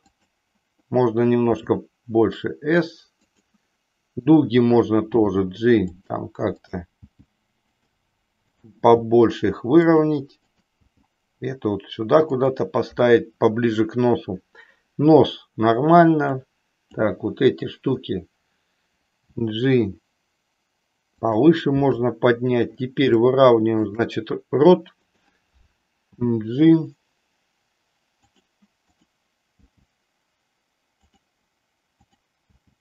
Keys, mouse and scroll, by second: 1.5 s, 3.3 click, 4.3 click, 5.2 g, 6.1 click, 6.6 click, 6.9 g, 7.7 click, 8.6 click, 10.6 click, 10.9 g, 16.3 click, 19.5 g, 23.2 shift+middle click, 25.1 click, 26.2 g, 28.9 click, 29.7 g, 31.1 click, 32.1 click, 32.5 g.